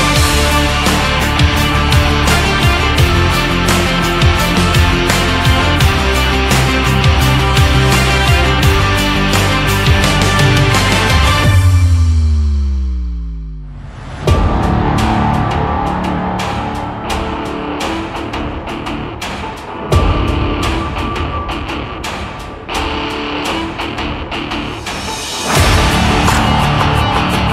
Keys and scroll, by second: 10.4 ctrl+z, 12.1 Left, 15.1 Left, 20.6 Right.